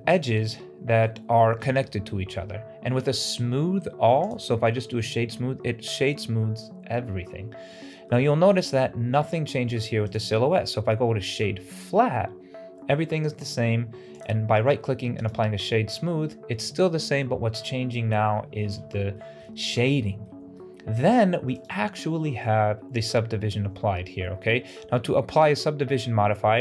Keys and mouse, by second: 4.2 click, 7.6-8.0 middle drag, 8.2 shift+middle drag, 10.1-11.3 drag, 14.1-15.2 drag, 19.0 shift+middle drag, 19.7-20.1 middle drag, 20.4-20.8 shift+middle drag, 25.2 right click.